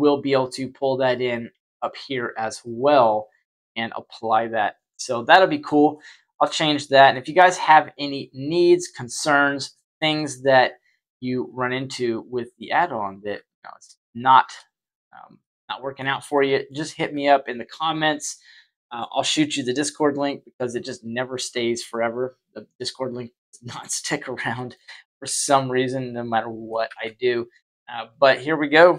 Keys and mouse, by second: 5.9-6.3 shift+middle drag, 7.0 shift+middle drag, 7.6-9.1 middle drag, 9.7 Tab, 12.0 right click, 13.4 alt+shift+right click, 13.6 alt+shift+right click, 14.7 right click, 15.3 middle click, 16.3 middle click, 16.9 Tab, 24.5 middle click, 25.2 shift+q, 26.8 shift+a.